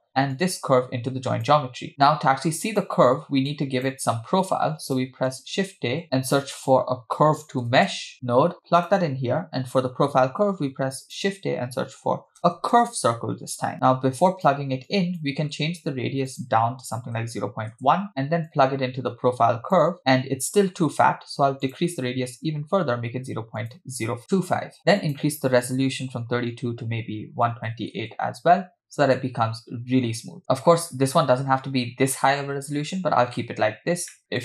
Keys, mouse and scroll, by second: 0.4-1.5 drag, 1.9-2.6 scroll down 2, 2.6 click, 3.5 click, 4.5-5.1 drag, 6.8 shift+a, 10.5 shift+a, 13.7 click, 14.9 click, 15.5-16.3 scroll up 2, 16.3-17.8 drag, 18.5-19.8 drag, 20.0-20.6 scroll up 6, 21.7-24.2 drag, 25.0-28.1 drag, 30.4 scroll down 2, 31.3-32.4 scroll up 1, 32.4-33.8 scroll up 1, 33.8-34.1 scroll down 2, 34.1 middle click.